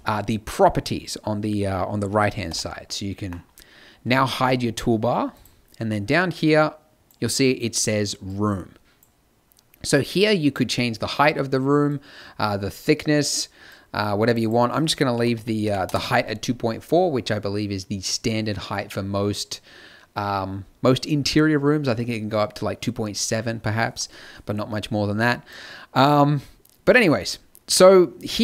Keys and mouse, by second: 2.4 t, 4.2-8.5 drag.